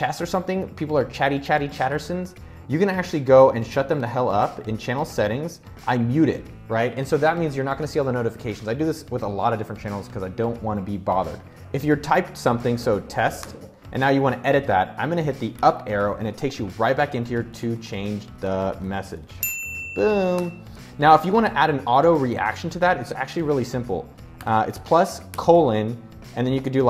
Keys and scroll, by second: 12.2-13.2 typing, 15.0 Up, 16.3 super+a, 16.7-20.6 typing, 19.8 Return, 24.7-25.3 typing, 26.6-26.8 typing.